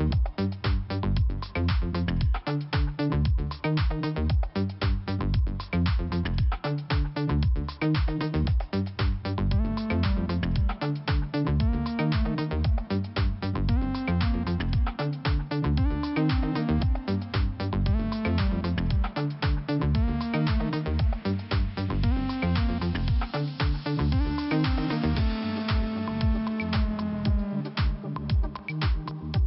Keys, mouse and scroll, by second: 0.6 click, 0.7 click, 1.4 click, 2.5 click, 2.5 click, 3.0 click, 4.7 click, 4.8 click, 5.3 click, 5.9 click, 6.9 click, 7.0 click, 7.6 click, 9.6 click, 15.5 click, 16.4 scroll down 1, 17.6 click, 22.3 click, 22.4 click, 22.4 double click, 22.5 double click, 22.6 double click, 22.7 double click, 22.8 double click, 22.9 double click, 23.0 double click, 23.4 double click, 23.5 double click, 23.6 double click, 23.9 double click, 24.0 double click, 24.2 double click, 24.3 double click, 24.5 double click, 24.6 double click, 24.9 double click, 25.2 double click, 27.0 click, 29.4 click.